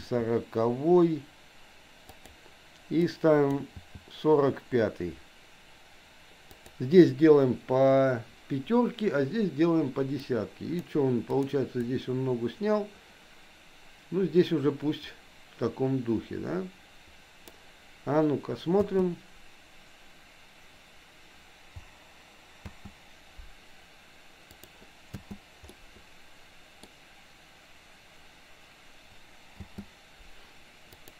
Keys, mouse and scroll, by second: 3.0 click, 3.7 g, 10.2 click, 11.4 click, 11.9-17.6 drag, 18.9 space, 22.6 space, 24.5 click, 25.2 space, 25.7-27.0 middle drag, 29.6 space, 31.0 click.